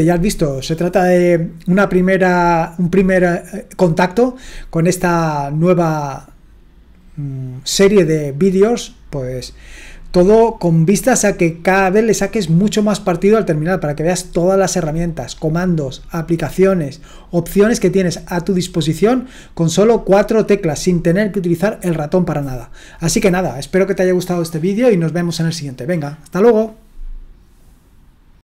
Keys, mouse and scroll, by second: 28.3 click.